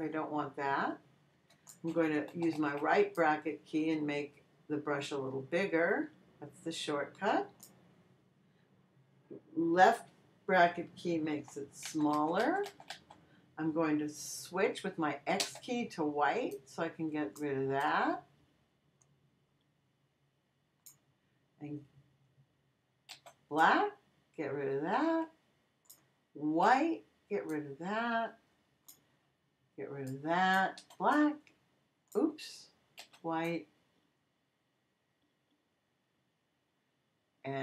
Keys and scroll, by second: 2.3 ], 11.8 [, 15.4 x, 23.1 x, 26.6 x, 30.8 x, 33.0 x.